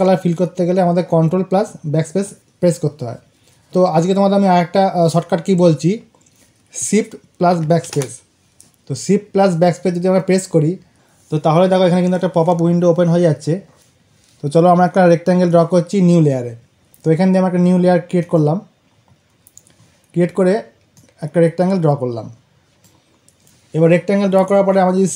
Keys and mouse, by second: 18.1 click, 20.8-25.0 drag.